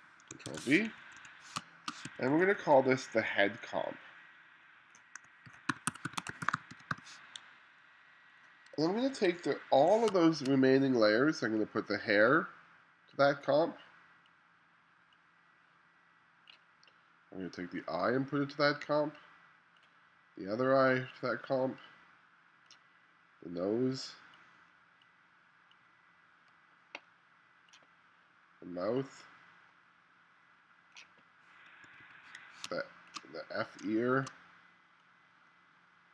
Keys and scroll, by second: 0.5 super+v, 1.0 2, 1.6 space, 2.1 2, 5.3-7.5 typing, 8.8 1, 10.1 space, 31.9 2, 32.7 space, 33.9 space.